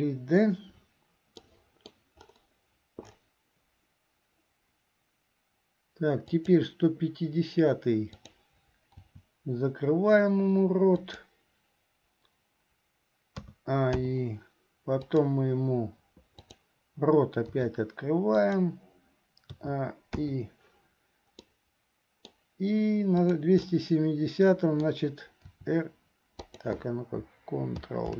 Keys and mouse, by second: 1.5 middle click, 6.5 click, 8.2 click, 9.2 r, 13.6 a, 14.3 i, 15.3 right click, 16.5 click, 17.7 r, 19.8 a, 20.5 i, 21.5-22.5 middle drag, 23.4 click, 23.9-25.1 middle drag, 25.6 r.